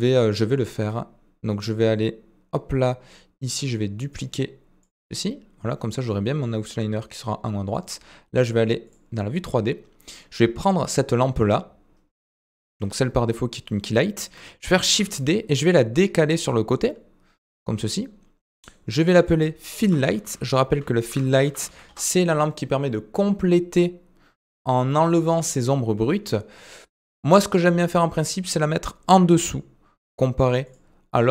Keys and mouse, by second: 4.1 click, 6.1 click, 7.6-8.9 drag, 10.0-10.8 middle drag, 19.0-26.1 drag, 22.1 typing, 26.9-27.4 middle drag.